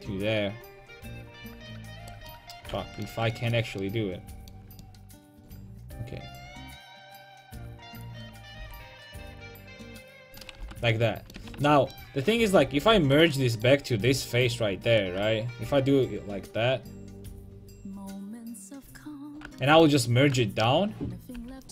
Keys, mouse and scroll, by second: 2.1 right click, 2.3 middle click, 2.7 right click, 3.6-7.4 middle drag, 8.6 k, 11.0 click, 11.0 middle click, 11.4 a, 12.6 ;, 12.9 l, 13.6 middle click, 15.0-18.6 drag, 18.9-19.9 middle drag, 21.4 a.